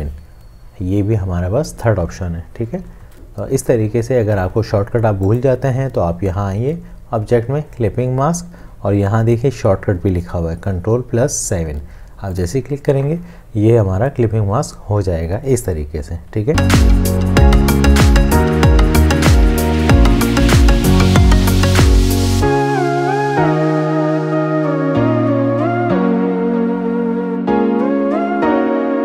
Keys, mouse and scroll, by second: 3.0 ctrl+z.